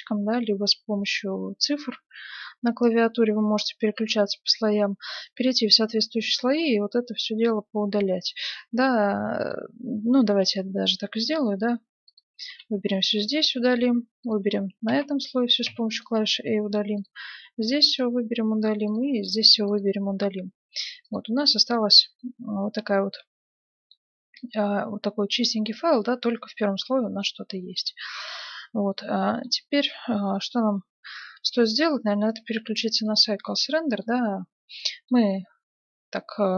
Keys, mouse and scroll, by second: 2.0 2, 3.0 3, 8.4-11.1 drag, 10.2 x, 12.0-13.8 drag, 12.4 a, 12.8 x, 13.8 click, 14.2-16.1 drag, 14.8 a, 15.6 x, 16.9-18.7 drag, 17.3 a, 17.6 x, 18.9-20.5 drag, 19.2 a, 19.5 x, 21.0 click, 22.7 middle click, 23.5 middle click, 25.9-30.7 middle drag, 32.2-34.0 drag, 34.0 middle click, 34.4 click, 34.6-35.7 middle drag.